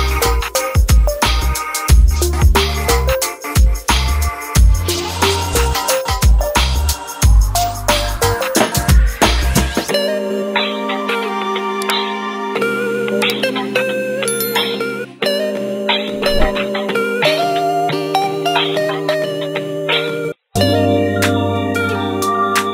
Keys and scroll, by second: 17.9 ctrl+q.